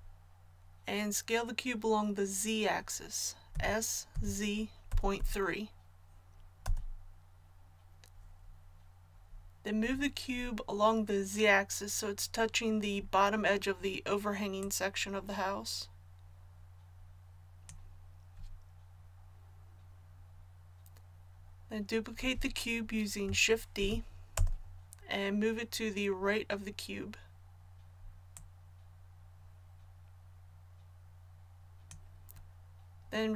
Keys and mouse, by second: 3.5 s, 14.6-23.8 drag, 23.8 shift+d, 28.3-33.3 drag.